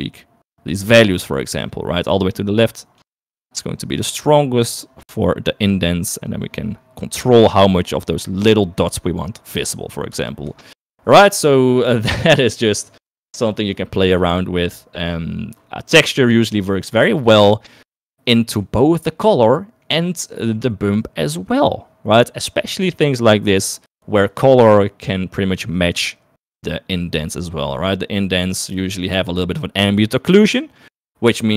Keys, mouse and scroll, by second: 0.4-4.0 drag, 4.2-9.9 drag, 11.3 shift+click, 16.4 click, 17.2 click, 19.3-20.4 drag, 20.8 click, 28.9 click.